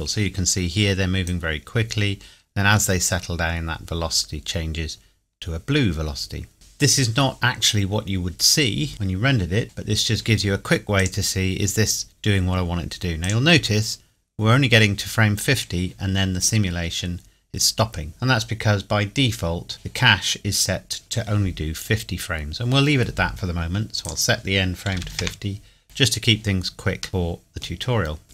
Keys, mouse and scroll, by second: 1.3 click, 5.0 scroll up 1, 6.5 click, 7.9-8.9 scroll down 2, 8.9-11.0 scroll down 1, 11.0 click, 13.3 click, 18.4 scroll down 1, 19.2 scroll up 1, 19.4 scroll down 1, 24.0 click, 24.9 KP_5, 25.1 KP_0, 25.2 KP_Enter, 26.9 scroll up 1, 27.1 middle click, 27.9 scroll up 1.